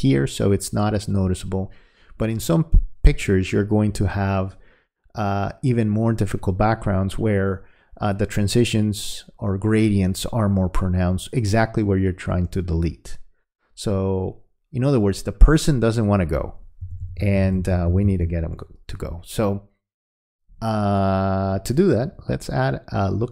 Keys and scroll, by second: 16.8 ].